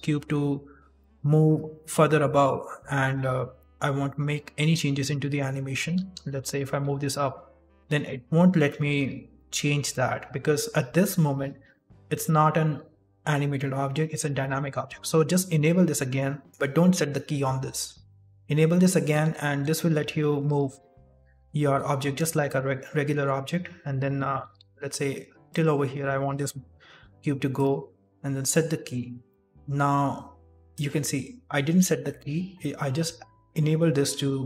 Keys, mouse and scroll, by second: 5.9 g, 15.4 click, 19.0 g, 21.5 i, 24.3 g, 26.9 i, 28.5 click.